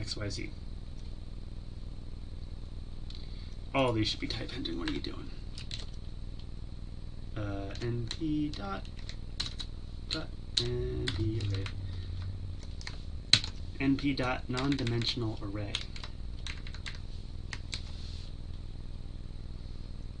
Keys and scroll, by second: 11.1 Tab, 14.5 ctrl+c, 17.7 ctrl+v.